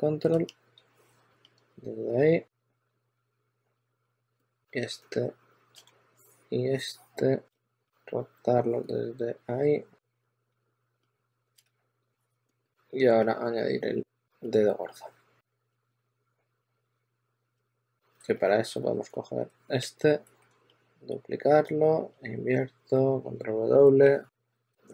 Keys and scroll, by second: 2.4-4.2 typing, 10.1-13.1 typing, 14.9-17.3 typing, 18.6 w, 22.6 super+w, 24.6 w.